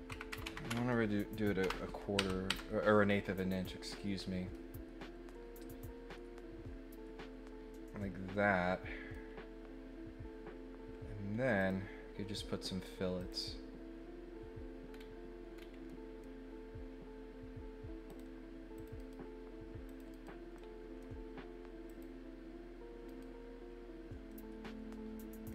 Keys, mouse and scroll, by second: 3.6-9.1 middle drag, 11.6 click, 13.2 click, 14.9 scroll up 1, 15.5 scroll up 1, 15.8 middle click, 18.0 click, 18.7 click, 18.9 right click, 19.8 click, 20.1 right click, 20.5 middle click, 21.8 click, 23.1 right click, 24.3-25.4 scroll up 2.